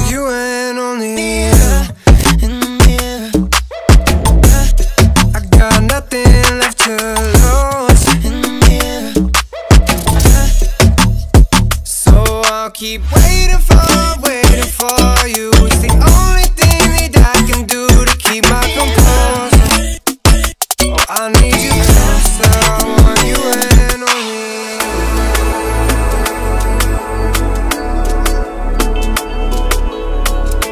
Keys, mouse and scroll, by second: 0.4-3.3 drag, 3.6 ctrl+z, 4.4 ctrl+z, 6.0-11.3 drag, 11.6-12.0 alt+scroll up 1, 12.1 b, 12.8 click, 13.7 [, 13.8 [, 14.0 [, 14.1 [, 14.3-15.8 drag, 16.3 v, 16.6 alt+scroll down 1, 17.3 alt+scroll down 1, 17.7 click, 18.5 ctrl+t, 18.9-19.9 alt+scroll up 2, 20.0-21.3 drag, 21.4 click, 22.9 Up, 23.8 Return, 25.7 ctrl+j, 26.2 ctrl+t, 26.7-30.4 drag, 30.4 Return.